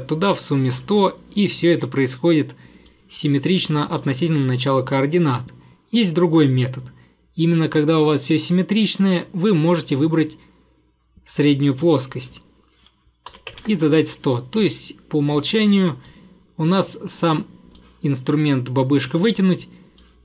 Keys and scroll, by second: 13.1-14.0 typing.